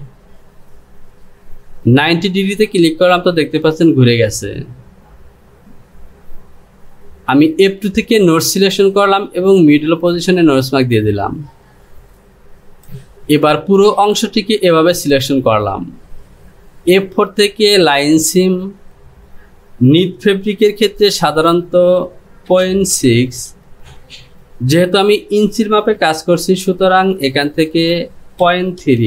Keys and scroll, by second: 27.4 Up.